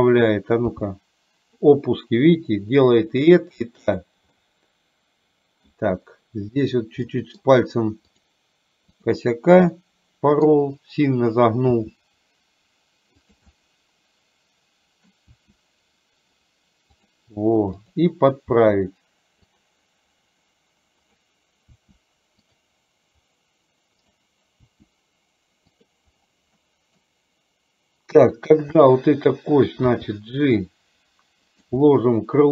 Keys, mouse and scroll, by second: 0.8 g, 4.4-5.8 middle drag, 7.2 middle click, 8.2 click, 9.9 middle click, 11.8 r, 13.6-15.2 middle drag, 15.3 r, 17.8 click, 18.6 r, 21.8 r, 24.1 click, 24.7 r, 26.7 middle click, 30.1 g, 31.8-32.5 middle drag.